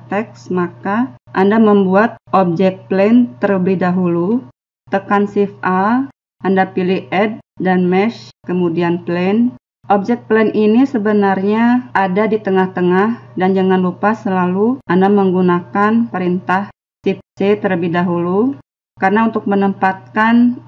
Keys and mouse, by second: 5.6 shift+a, 11.3-15.4 middle drag.